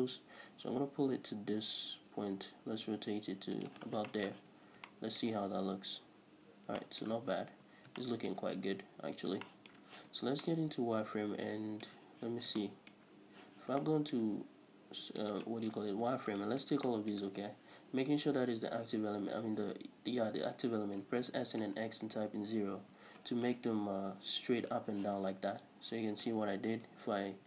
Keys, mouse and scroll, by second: 3.7 click, 3.9 scroll down 1, 4.1-15.3 shift+middle drag, 4.4 z, 5.5-6.4 scroll up 2, 6.4-6.9 scroll up 1, 7.2 Tab, 7.8 scroll down 2, 8.7-9.3 scroll up 2, 9.3 scroll up 1, 10.0 z, 12.2 z, 13.5 z, 15.3 alt+right click, 16.4 alt+shift+right click, 16.9 shift+middle click, 21.2 s, 23.0 Return, 25.1 z, 25.8-26.2 scroll down 1, 26.5 ctrl+z, 27.0 ctrl+shift+z.